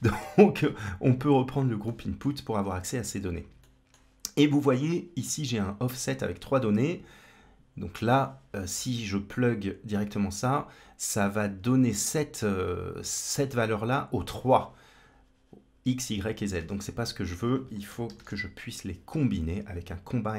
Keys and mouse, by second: 1.0 click, 1.7 middle click, 2.3 click, 3.5 middle click, 8.0-9.8 drag, 14.1-14.6 drag, 16.4 shift+a.